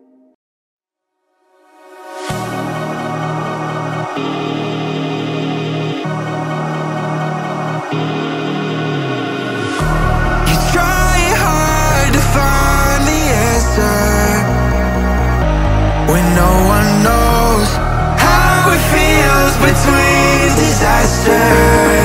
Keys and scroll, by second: 3.7 Return, 4.7 Up, 13.2 Return, 13.7 Up, 20.6-22.0 typing.